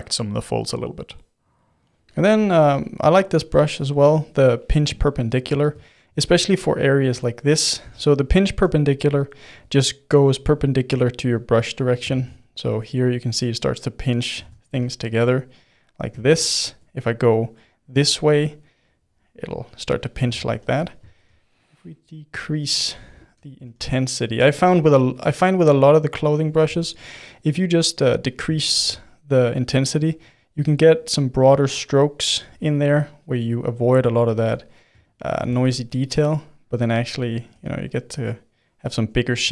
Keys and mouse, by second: 1.0-11.3 middle drag, 11.3 click, 12.1 ctrl+z, 12.4-14.4 drag, 14.4 ctrl+z, 14.7 f, 15.3 click, 16.1 ctrl+z, 16.4-18.8 middle drag, 18.8-19.8 drag, 19.8 middle click, 20.2 ctrl+z, 20.5 f, 21.1 shift+f, 22.8 middle click, 23.6 shift+f, 24.5-25.8 middle drag, 25.8-28.7 drag, 28.7 shift+f, 29.9-35.5 drag, 35.5-36.8 middle drag, 36.8 click, 37.5 f, 38.1-39.2 drag, 39.2 ctrl+middle click.